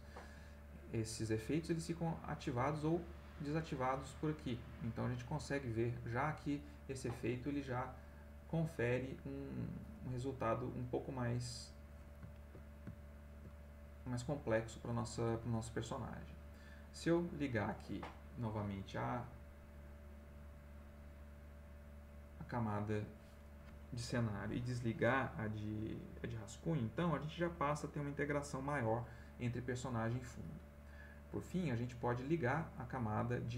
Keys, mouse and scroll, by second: 2.0 click, 2.8 click, 3.8 click, 4.3 click, 5.3 click, 5.6 click, 6.7 middle click, 7.4 ctrl+middle click, 8.0 ctrl+middle click, 10.5 click, 11.7 middle click, 12.3-13.9 ctrl+middle drag, 13.9 ctrl+middle click, 16.2 click, 16.9 click, 21.9 click, 32.0 click, 32.9 click, 33.4 click.